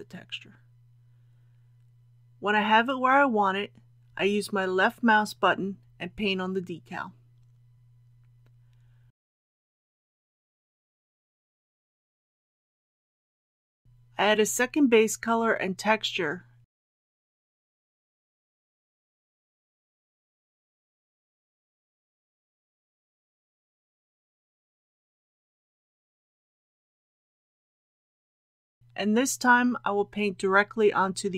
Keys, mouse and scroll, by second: 7.1-10.9 drag, 11.1-12.9 middle drag, 13.8 KP_1, 14.1 click, 17.8 KP_7, 18.7 scroll down 1, 19.6 click, 20.9-21.6 typing, 21.9 Return, 24.2 click, 26.3-26.7 scroll down 1, 27.5 click.